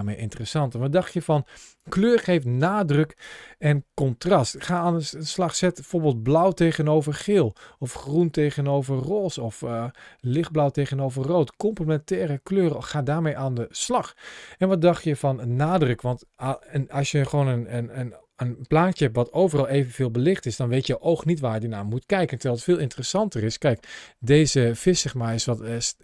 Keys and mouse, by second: 4.3 click, 13.6 click, 24.5 ctrl+shift+a.